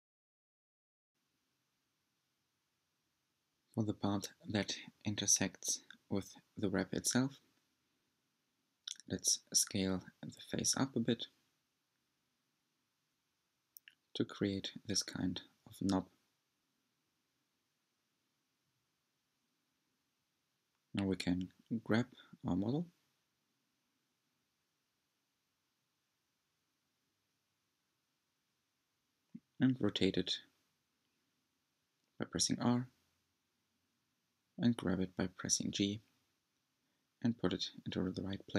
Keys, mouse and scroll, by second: 2.4 middle click, 2.4-3.8 scroll up 7, 5.9 e, 7.6 s, 10.3 g, 13.8 s, 15.2 e, 18.7 s, 21.2-21.6 scroll down 4, 21.8 middle click, 22.5-23.2 scroll down 5, 24.4 click, 25.1-25.6 scroll down 7, 25.6 shift+middle click, 26.4-27.4 scroll up 8, 27.4-28.5 shift+middle drag, 28.5-28.9 scroll up 2, 30.5 scroll up 1, 31.1-31.5 scroll down 2, 33.1 Tab, 35.4 r, 37.1 g.